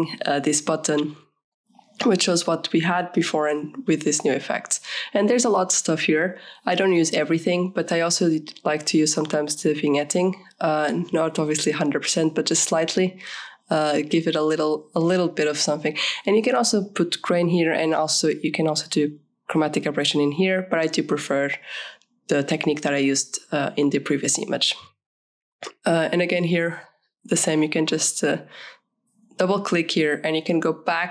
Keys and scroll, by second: 18.5 KP_Subtract, 18.8 KP_8, 18.9 Return.